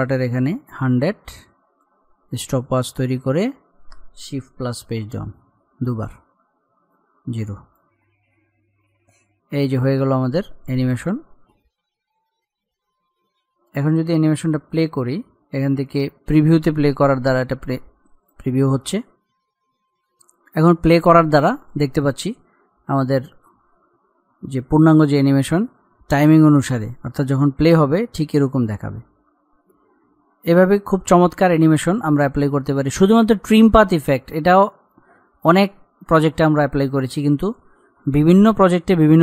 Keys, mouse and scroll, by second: 4.7 shift+Page_Down, 7.2-8.2 drag, 8.2 scroll up 1, 8.9-14.9 drag, 14.9-15.2 scroll down 1, 15.5 middle click, 15.9 click.